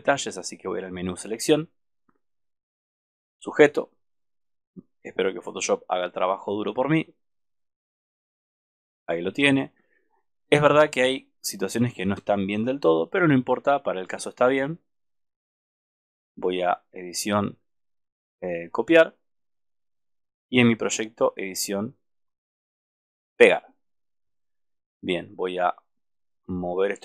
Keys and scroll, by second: 14.6 alt+space.